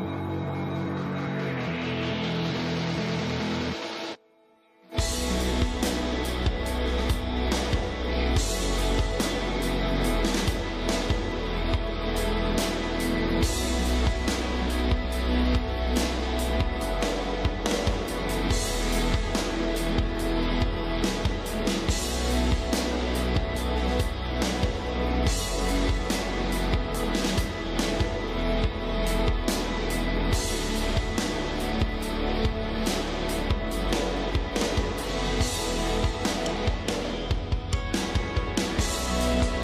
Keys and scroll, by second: 10.5 space, 13.3 space, 24.9 space.